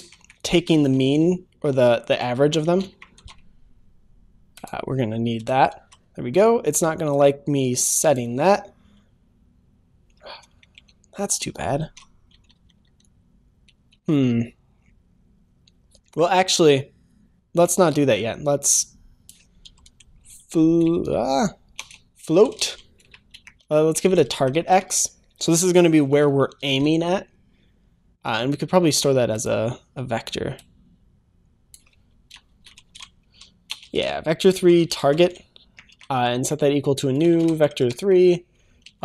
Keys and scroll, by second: 3.1 ctrl+s, 5.6 ctrl+s, 11.8 ctrl+s, 25.4 ctrl+s, 26.5 ctrl+s, 28.9 ctrl+s.